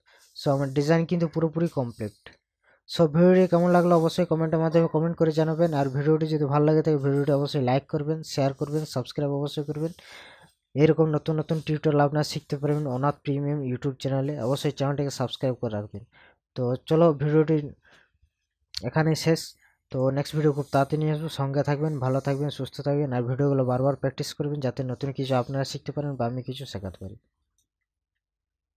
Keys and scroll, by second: 1.1 ctrl+KP_Add, 2.0 ctrl+KP_Subtract.